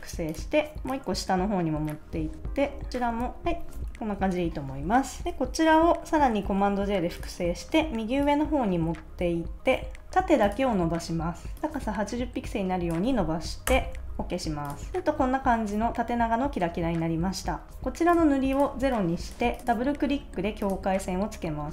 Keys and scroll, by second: 3.7 super+-, 3.9 super+s, 6.4 super+j, 13.6 Return.